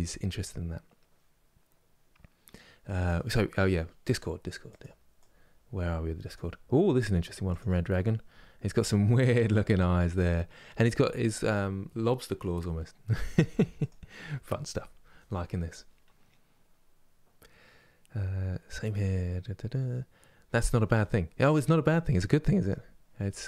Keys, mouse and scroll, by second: 5.6-22.3 middle drag, 22.3 click, 23.0 middle click.